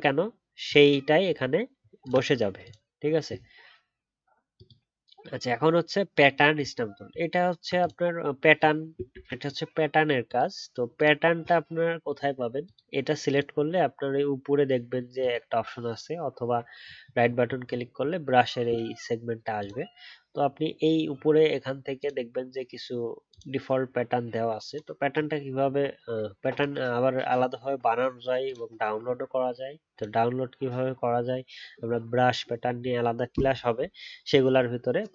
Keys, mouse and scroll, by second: 2.0 alt+click.